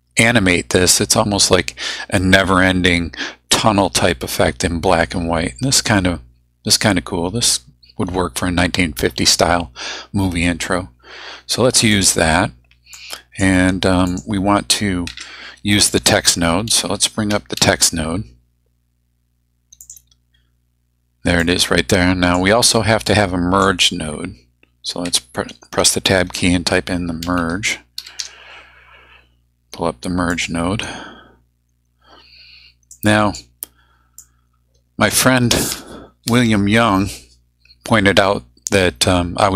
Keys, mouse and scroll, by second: 11.9 click, 12.9-13.6 drag, 14.1 click, 15.1 Tab, 16.4-18.1 typing, 19.8 click, 21.4-22.6 drag, 23.1-23.8 drag, 25.1 Tab, 27.0-28.7 typing, 30.3 click, 32.9-33.5 drag, 34.2-35.3 drag.